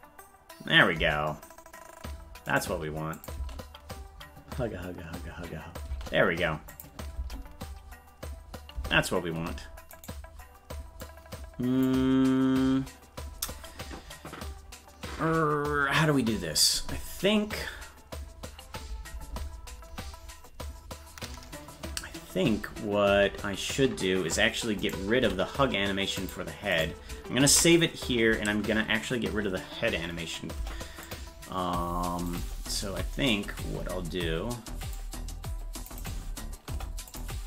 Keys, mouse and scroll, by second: 2.6 right click, 3.2 click, 3.4 space, 6.8 click, 6.8 space, 7.2 space, 10.1 right click, 11.1 click, 24.8 right click, 25.2 c, 27.7 ctrl+s, 30.6 Delete, 32.3 right click, 32.9 c, 36.7 Delete.